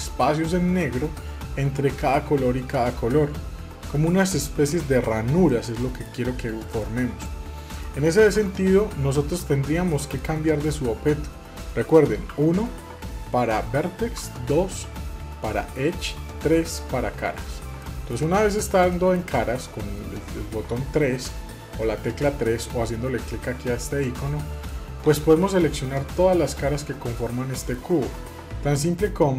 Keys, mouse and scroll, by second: 5.5 middle click, 6.3-6.8 scroll down 1, 6.8 middle click, 7.2-7.8 scroll down 2, 7.8 middle click, 8.4 Tab, 9.3 Tab, 9.9 middle click, 12.3 1, 17.8 middle click, 18.9-22.0 middle drag, 24.2 shift+middle click, 25.5-28.5 middle drag.